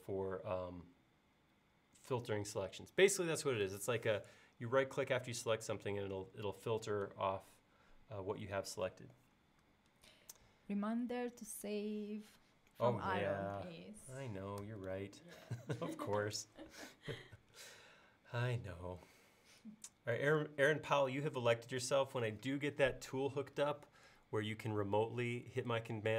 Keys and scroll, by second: 14.7 super+s.